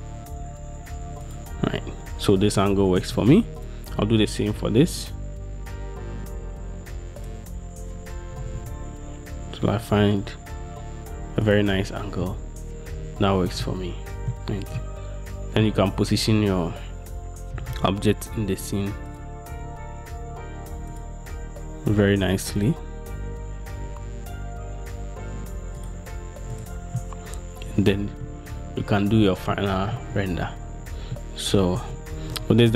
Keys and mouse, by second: 2.7 shift+click, 3.7 click, 5.0 r, 8.5 r, 8.7 r, 11.6 middle click, 13.8-15.9 shift+middle drag, 17.7 r, 17.9 r, 19.7 r, 23.9 g, 27.1-28.4 middle drag, 29.7 shift+click, 31.3 shift+click.